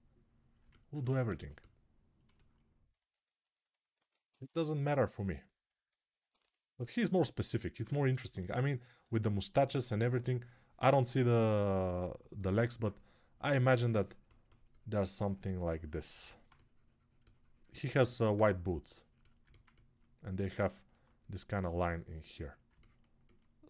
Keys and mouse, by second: 1.8-3.8 alt+shift+right drag, 3.8 alt+q, 3.8-20.5 ctrl+alt+drag.